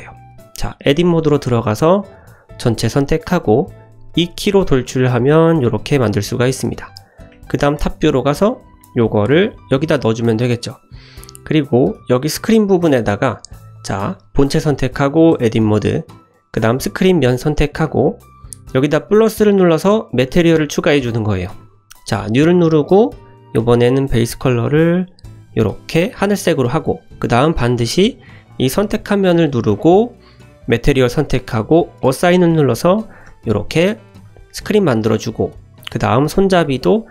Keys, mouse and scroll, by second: 0.1-0.5 middle drag, 0.9 Tab, 1.7 shift+middle drag, 2.6 a, 4.1 e, 7.8 scroll up 2, 8.1 shift+middle drag, 8.6 s, 9.3 g, 10.6 shift+middle drag, 11.2-11.5 middle drag, 11.6 click, 12.0 Tab, 12.8 shift+middle drag, 13.4 Tab, 13.7 click, 14.3 click, 15.3 Tab, 15.9 click, 16.8 click, 19.5 click, 22.0 click, 23.6 click, 28.4 click, 29.1 click, 30.7 click, 32.0 click, 32.7 click, 33.2 Tab, 33.8 scroll down 1, 34.0 `, 34.6 scroll up 1, 35.2 shift+middle drag, 35.2 scroll up 1, 35.9 click.